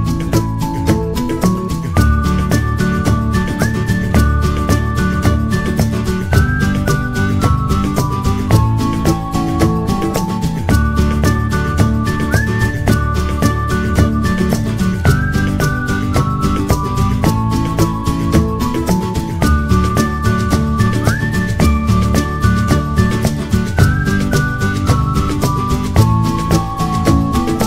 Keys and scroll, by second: 0.6-1.3 typing, 19.5 typing, 24.5 1.